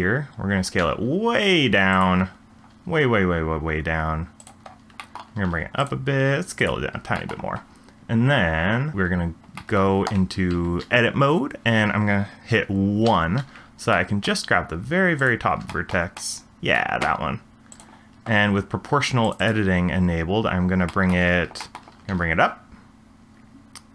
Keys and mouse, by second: 0.8 s, 2.7 s, 5.2 shift+middle drag, 5.3 g, 6.2 s, 9.6 shift+middle click, 10.5 Tab, 13.0 1, 13.9 middle click, 15.2 click, 15.7 shift+middle click, 16.2 middle click, 19.2 click, 20.9 shift+middle click, 21.6 shift+middle click, 22.0 g.